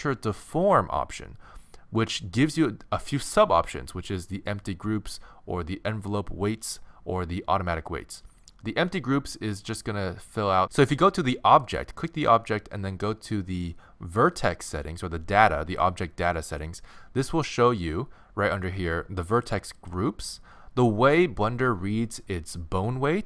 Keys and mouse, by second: 11.7-15.8 right drag, 16.5-21.6 drag.